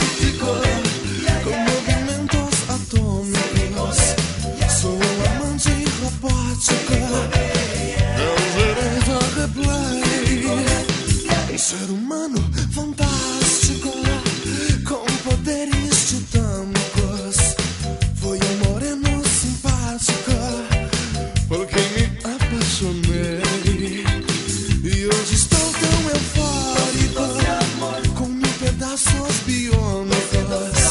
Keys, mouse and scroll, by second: 5.9 right click, 8.8 click, 10.3 click, 10.8 click, 12.3-14.9 scroll down 5, 16.9 click, 17.7-19.1 scroll down 4, 20.1 scroll up 1, 20.7-22.0 scroll up 1, 22.3-23.0 scroll up 3, 23.3-24.7 scroll up 2, 24.9 alt+a.